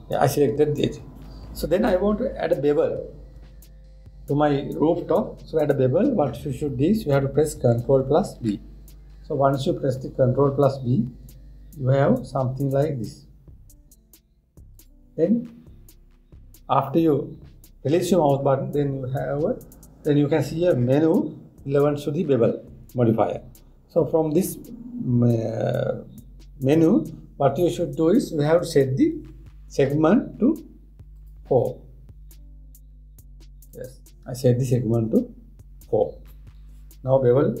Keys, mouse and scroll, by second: 9.0 ctrl+b, 31.8-34.5 drag.